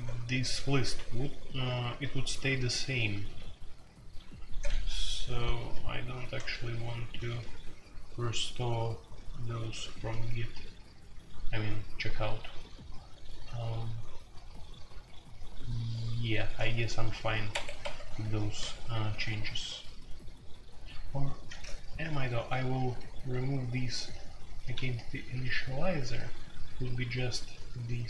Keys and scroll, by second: 0.0-0.9 typing, 2.0-7.8 typing, 9.1-9.7 typing, 17.5 Escape, 18.2-19.5 typing, 22.2-25.2 typing.